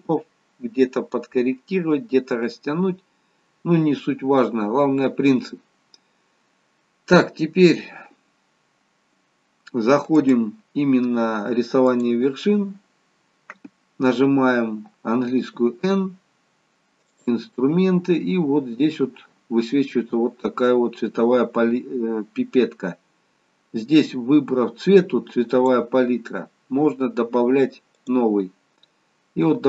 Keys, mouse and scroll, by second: 1.4 middle click, 10.2 click, 15.5 n, 17.2 click, 18.3 scroll down 3, 19.6-20.2 scroll down 2, 25.7 click.